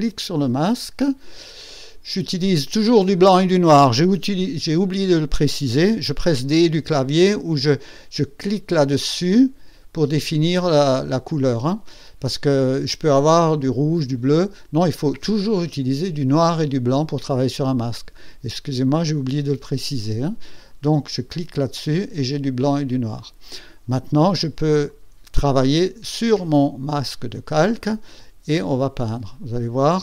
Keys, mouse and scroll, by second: 6.6 d, 21.5 click, 21.7 click, 24.8 click, 28.0-30.0 drag.